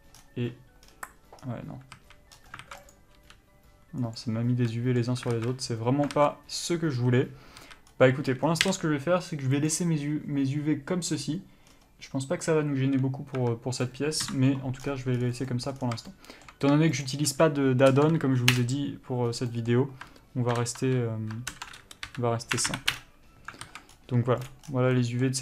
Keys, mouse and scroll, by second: 2.2 a, 2.8 alt+a, 3.1 click, 3.4 g, 4.8 a, 5.0 middle click, 5.5 alt+a, 7.8 a, 8.1-8.6 scroll up 1, 8.6 scroll down 1, 9.9 u, 13.7 Tab, 14.5 KP_Divide, 15.0 scroll down 1, 15.4 scroll up 1, 15.7 middle click, 15.9 scroll up 1, 16.0 scroll down 1, 16.3 shift+middle click, 17.2 shift+click, 18.8 Return, 19.7 middle click, 23.2 Up, 23.8 alt+a, 24.1-24.5 scroll up 1, 24.7 click, 24.8 scroll down 1, 25.2 middle click.